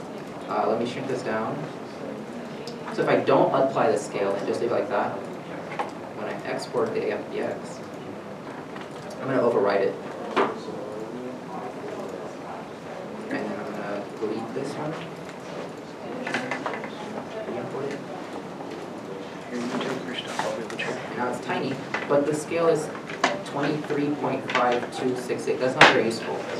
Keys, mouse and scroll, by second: 1.0 middle click, 1.0 s, 12.0 ., 12.1 alt+Tab, 13.7 alt+a, 15.0 Delete, 16.4 alt+Tab, 20.8 alt+Tab, 20.8 right click.